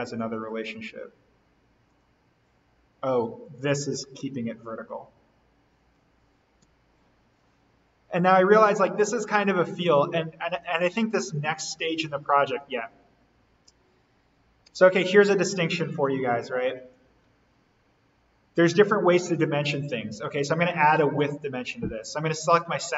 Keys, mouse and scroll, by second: 0.2-0.7 scroll down 1, 1.8 click, 4.5 click, 4.9 Delete, 6.5 d, 8.6 click, 14.6 Escape, 18.0 Delete, 20.5-21.3 typing.